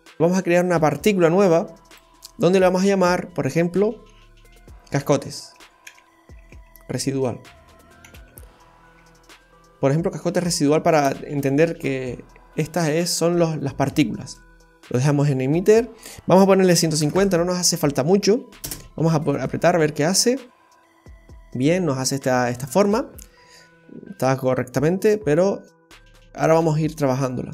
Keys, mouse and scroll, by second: 0.9 click, 1.9 click, 2.3 click, 2.5 click, 15.7 click, 18.6 space, 19.5-20.3 scroll up 3.